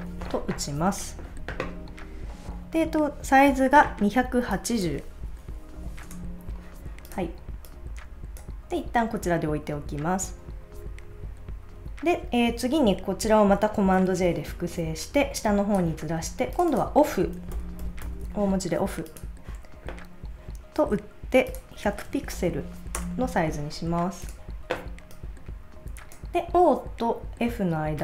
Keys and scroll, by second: 5.2-6.4 typing, 22.1 1, 22.3 0, 22.9 Return.